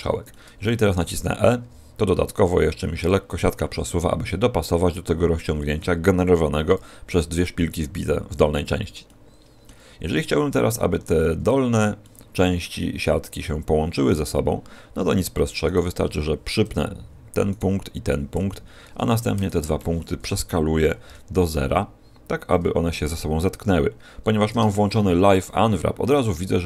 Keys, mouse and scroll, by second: 0.2 middle click, 1.5 e, 9.0 middle click, 11.0-11.9 scroll up 1, 11.9 middle click, 11.9 scroll up 5, 15.5 right click, 16.6 p, 17.4 right click, 18.3 p, 19.3 shift+right click, 20.7 s, 26.1-26.6 scroll down 2.